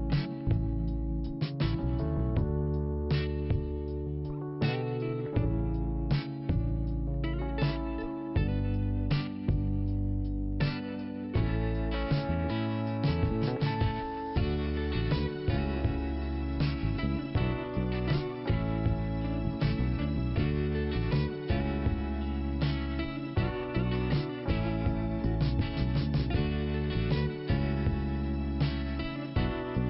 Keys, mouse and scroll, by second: 1.4 click, 2.2 click, 3.1 click, 3.6 click, 3.7 click, 4.6 right click, 8.2 click, 10.3 middle click, 11.4 click, 21.1 click, 24.2 click, 27.5 click, 29.7 middle click.